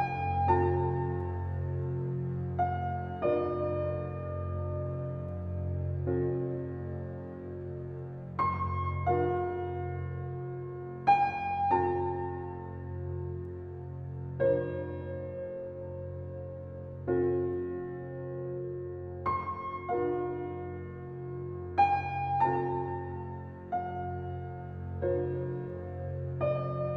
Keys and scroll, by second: 0.9 Left, 2.6 Left, 4.6 Left, 7.2 Left, 8.9 Left, 11.0 Left, 14.2 Left, 15.5 Left, 16.7 Left, 18.0 Left, 19.3 Left, 20.9 Left, 22.0 Left, 23.2 Left, 25.7 Left.